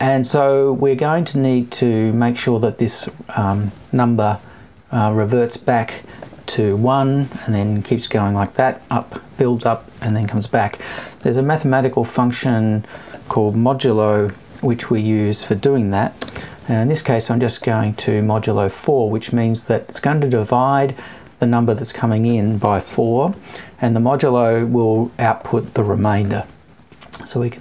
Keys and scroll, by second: 4.4 Up, 22.8 Right.